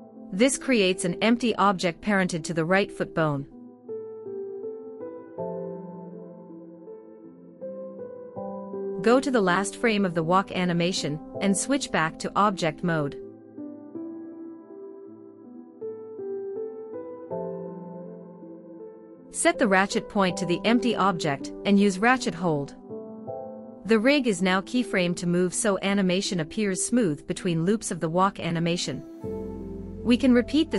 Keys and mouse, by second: 3.4 Left, 3.6 Left, 3.7 Left, 4.0 Left, 4.1 Left, 4.4 Left, 4.6 Left, 4.7 Left, 4.9 Left, 5.1 Left, 5.4 Left, 5.6 Left, 6.2 Right, 6.4 Right, 6.6 Right, 6.8 Right, 7.0 Right, 7.2 Right, 7.4 Right, 7.6 Right, 7.8 Right, 8.0 Right, 8.4 Right, 8.7 Right, 10.0 Right, 10.7 Left, 15.1 ctrl+Tab, 19.1-20.5 drag, 22.2 click, 24.3 Right, 24.5 Right, 24.7 Right, 25.9 Right, 26.1 Right, 26.4 Right, 26.5 Right, 26.7 Right, 26.9 Right, 27.1 Right, 27.4 Right, 27.9 Right, 28.0 Right, 28.2 Right, 28.4 Right, 28.5 Right, 28.7 Right, 28.9 Right, 29.1 Right, 29.2 Right, 29.4 Right, 29.6 Right, 29.8 Right, 30.0 Right, 30.4 Right.